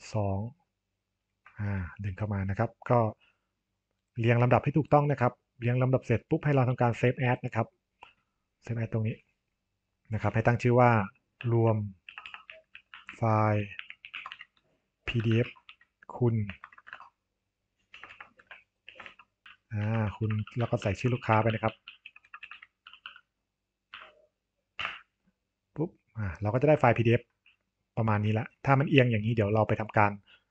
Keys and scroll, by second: 12.0 BackSpace, 14.0 shift+n, 14.1 space, 15.4 space, 16.9-19.8 typing, 24.7 Return.